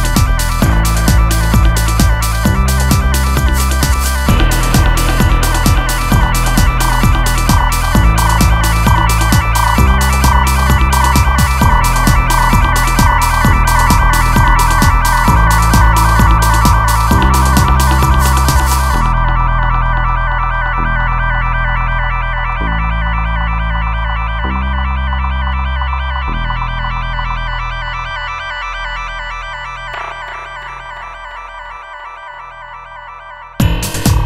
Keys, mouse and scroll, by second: 2.2 shift+a, 8.3 shift+a, 18.1-19.2 drag, 19.2 shift+a, 22.2 click, 22.7 click, 26.6-29.3 drag, 29.3 g, 33.8 shift+d.